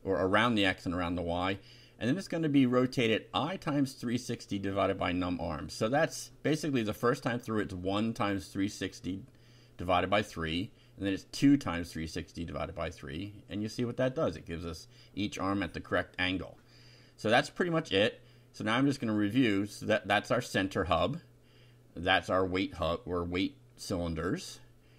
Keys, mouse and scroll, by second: 0.0-5.9 typing, 8.4 F5, 11.0-12.2 drag, 13.0-14.6 shift+right drag, 16.6 ctrl+r, 17.0 ctrl+Up, 18.5 shift+3, 19.0 F5, 20.5 BackSpace, 20.9 Down, 22.2 shift+3, 22.6 shift+F5, 23.9 BackSpace, 24.3 Down.